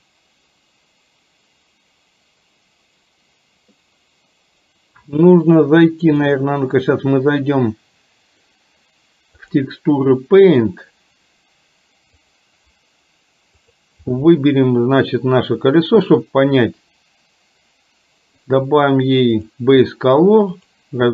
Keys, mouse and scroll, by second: 6.4-9.6 drag, 13.6 click, 18.5-20.9 drag.